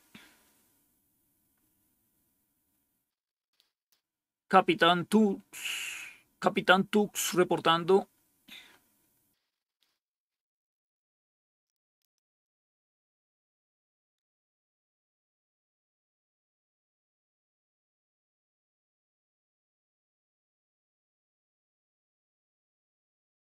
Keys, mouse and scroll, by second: 11.8-12.1 scroll down 2, 12.1 click.